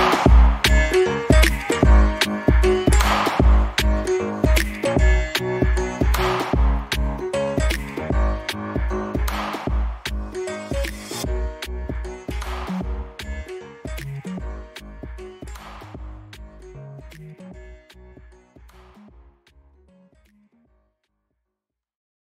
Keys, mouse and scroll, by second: 0.1-0.6 scroll down 1, 0.6 alt+click, 1.5 alt+middle click, 1.8 alt+click, 3.5-4.0 scroll down 1, 4.1 middle click, 5.8-6.3 scroll up 1, 6.3-6.8 scroll down 1, 6.8 middle click, 7.7 scroll up 1, 8.1 middle click, 8.4-9.0 scroll up 1, 9.0-9.4 scroll down 1, 9.9 alt+click, 10.5 alt+middle click, 10.8 alt+click, 13.3-13.9 scroll up 1, 13.9 n, 14.3-14.7 scroll up 1, 15.0 alt+middle click, 15.4 alt+click, 17.1 alt+middle click, 17.5 alt+click, 18.1 alt+middle click, 18.4 scroll down 1, 18.7 alt+middle click, 19.4 alt+click, 20.1 n, 20.7-21.0 scroll down 1, 21.0 alt+click.